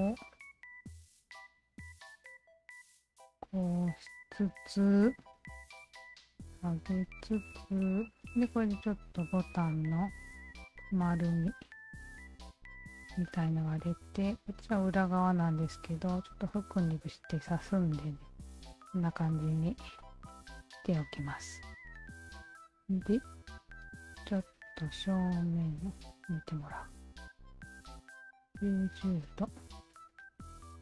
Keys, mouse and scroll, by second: 0.3 alt+click, 1.3-3.5 alt+shift+drag, 3.8-5.0 alt+drag, 5.4 w, 6.0-7.9 alt+drag, 8.2-10.1 alt+drag, 10.8 shift+click, 12.1 shift+click, 13.3 shift+click, 13.6 shift+click, 14.5 shift+click, 14.8 alt+click, 15.7 alt+click, 16.9-19.7 alt+drag, 20.0 alt+click, 20.5 alt+click, 21.5 Tab, 22.3 alt+click, 22.8 alt+click, 23.7 e, 24.6-26.3 drag, 27.4 click, 28.3 click, 28.9 click, 29.9 KP_9, 30.0 KP_0, 30.2 Return.